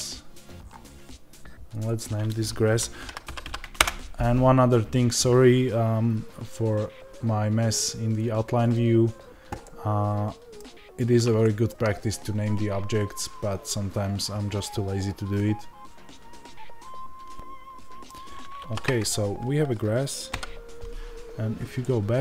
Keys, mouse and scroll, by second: 1.7 click, 9.6-22.2 middle drag, 20.2 KP_Divide.